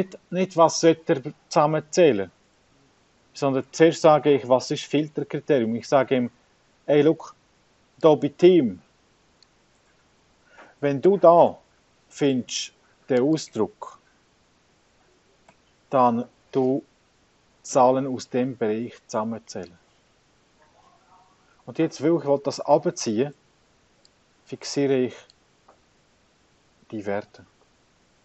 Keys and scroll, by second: 11.1 shift+,, 15.6 shift+,, 26.7 F4.